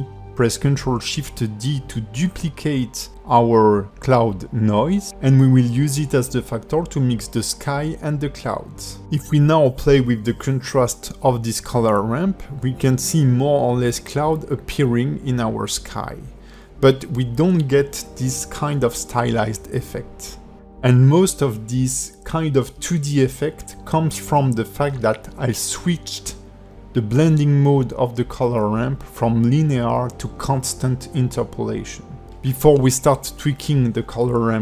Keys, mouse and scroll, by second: 0.0 shift+middle click, 0.9 ctrl+shift+d, 2.6 scroll down 2, 2.9 shift+middle click, 4.6 click, 12.7 scroll down 1, 13.2 middle click, 14.7 click, 17.2 click, 32.0 click.